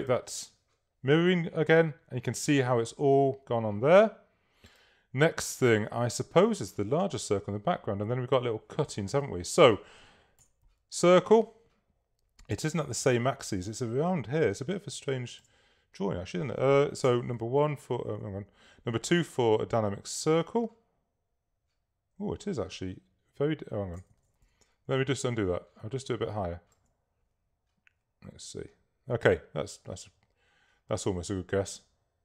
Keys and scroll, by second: 10.5 s, 17.1 shift+i, 24.4 shift+super+z, 25.1 super+z.